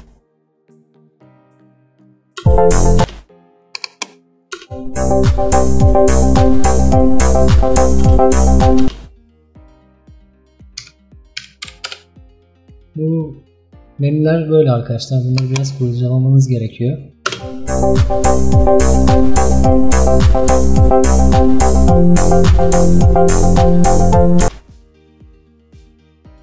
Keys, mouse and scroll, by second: 1.6 click, 2.5 space, 3.1 space, 3.7 click, 4.7 space, 8.1 space, 8.9 space, 11.9-17.3 drag, 17.3 space, 22.9 scroll up 1, 23.4 scroll up 1, 23.9 scroll down 1, 24.5 space.